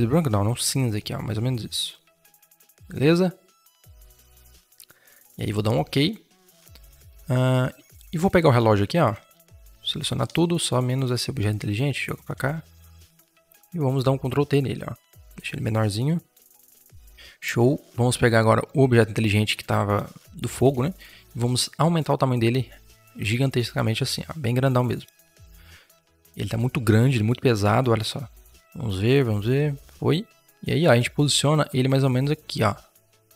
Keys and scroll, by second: 9.2 ctrl+t, 10.0 Escape, 13.0 ctrl+t, 16.5 Return, 17.0 ctrl+0, 20.4 ctrl+t, 24.9 Return.